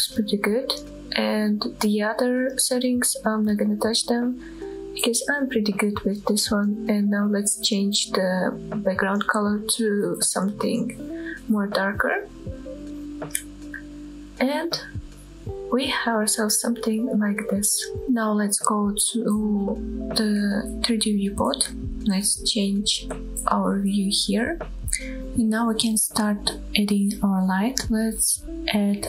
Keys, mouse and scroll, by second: 4.1-4.9 scroll down 4, 4.9 shift+middle click, 5.4-5.8 shift+middle drag, 5.8-6.6 scroll up 2, 6.6-7.0 drag, 6.6-7.0 scroll up 1, 15.1 click, 15.5-16.6 scroll down 2, 16.6-18.2 scroll up 2, 19.0-20.9 drag, 23.8 click, 24.3-24.7 scroll down 1, 24.7-25.6 middle drag, 25.2 click, 25.2 scroll down 2, 26.0-26.5 middle drag, 27.7 middle click.